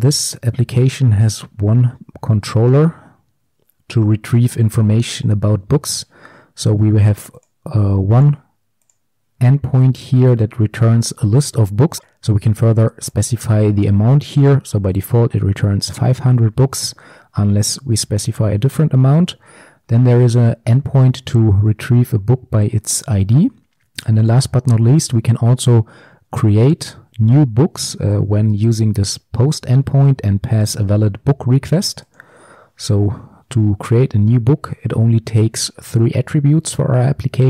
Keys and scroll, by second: 32.3 ctrl+b.